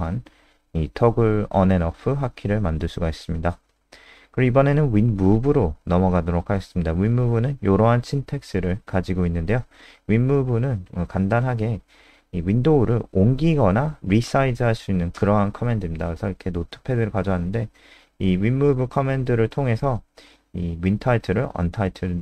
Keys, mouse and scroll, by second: 1.2-1.6 scroll up 2, 1.9 click, 1.9-2.5 scroll up 1, 2.3-5.0 typing, 5.2 Tab, 6.3 End, 6.6 Home, 6.7 ;, 6.9 ctrl+s, 7.1 End, 7.3 Return, 7.9 Return, 11.1 Return, 11.1 typing, 12.4 click, 13.4 ctrl+alt+space, 14.3 ctrl+Home, 14.5 Down, 17.1-21.8 typing.